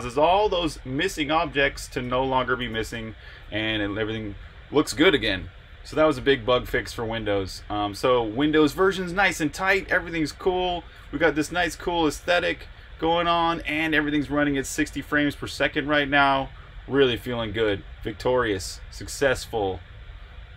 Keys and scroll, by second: 2.3-3.2 typing, 11.5 super+Tab.